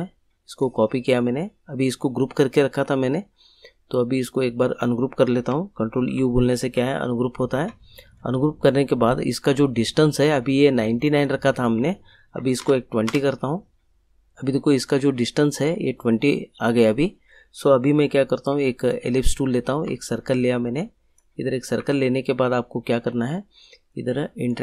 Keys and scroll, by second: 6.1 ctrl+u, 12.1-13.1 typing.